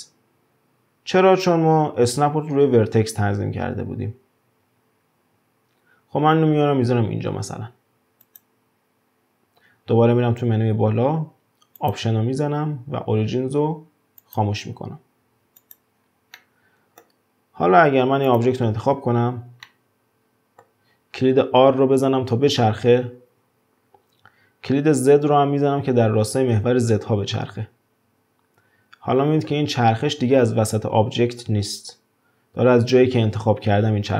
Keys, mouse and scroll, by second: 11.7-14.8 drag, 15.6 click, 16.0-16.3 scroll down 3, 16.3-17.6 middle drag, 17.6-18.2 scroll up 1, 18.2 click, 19.6-21.8 middle drag, 21.8 r.